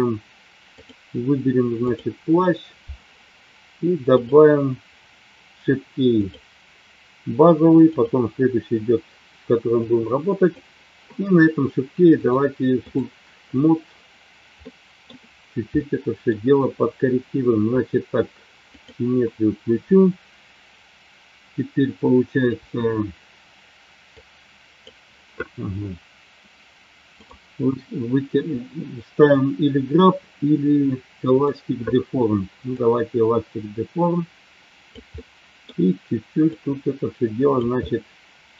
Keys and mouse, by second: 0.8 click, 4.2 click, 6.2 click, 7.9 click, 9.8 click, 12.1 click, 14.5 middle click, 15.6 middle click, 18.8 click, 24.1 click, 27.3 click, 31.3 click, 32.8-34.9 drag, 35.1 middle click, 36.5 click, 37.8 middle click.